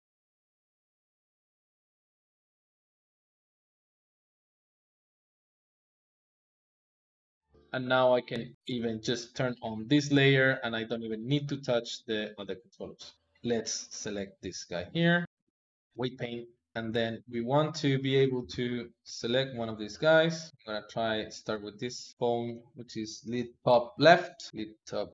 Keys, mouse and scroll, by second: 0.0 click, 0.6 ctrl+click, 1.3 click, 1.6 click, 2.0 click, 2.1 click, 3.3 i, 3.5 click, 4.3 alt+g, 4.8 alt+r, 5.1 Escape, 5.7 click, 6.5 shift+d, 6.8 g, 7.4 click, 9.0 click, 10.4-13.1 drag, 13.8 click, 14.8 ctrl+Tab, 16.3 ctrl+Tab, 16.7 shift+middle click, 17.2 Tab, 18.3 ctrl+Tab, 19.4 click, 19.9 click, 20.6 click, 21.5 ctrl+Tab, 22.1 click.